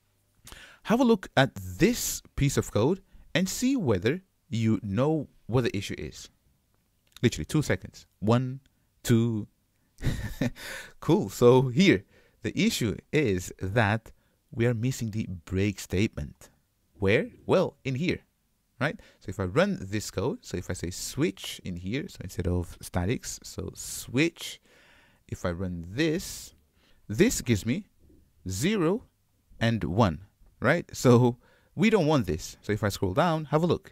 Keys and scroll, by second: 24.3 Return, 26.9 ctrl+shift+F10.